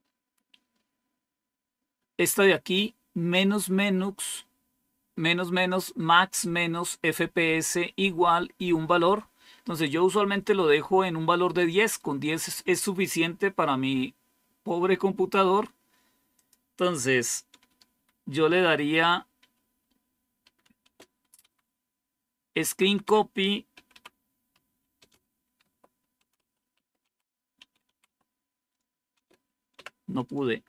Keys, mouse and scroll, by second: 0.4-1.2 typing, 0.6 scroll up 1, 16.2 click, 19.3 q, 21.3 Home, 21.5 Up, 22.4 Left, 22.6 Left, 22.8 Left, 22.9 Left, 23.6 typing, 24.9-29.7 typing.